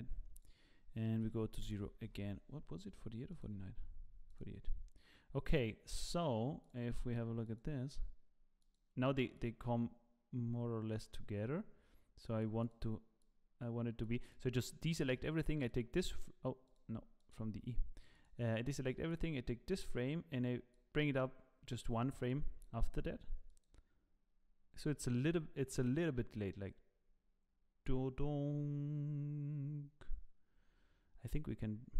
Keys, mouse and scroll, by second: 0.3 click, 3.3 click, 4.3 click, 5.6 click, 8.6 click, 12.6 click, 13.2 click, 14.3 click, 16.3 click, 16.7 click, 17.3 click, 18.2 click, 20.0 click, 22.3 click, 23.7 click.